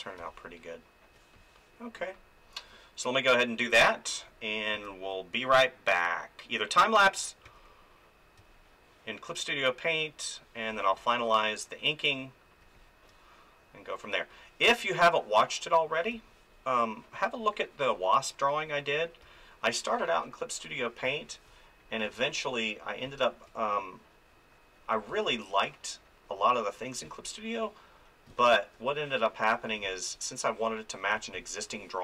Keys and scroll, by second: 0.2 space, 4.7 f, 7.4 f, 8.4 space, 16.1 space, 19.2 space, 21.0 space, 25.1 space, 27.0 space.